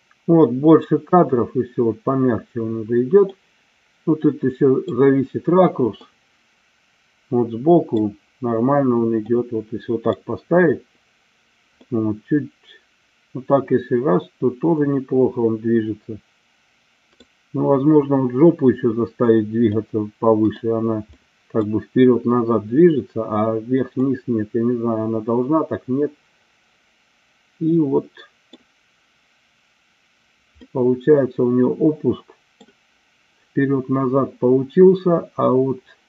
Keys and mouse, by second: 3.5-5.1 middle drag, 6.1-7.9 middle drag, 9.4-10.3 middle drag, 11.9-17.2 middle drag, 19.7-20.6 middle drag, 21.2-21.7 middle drag, 24.0-28.7 middle drag, 30.7-32.8 middle drag.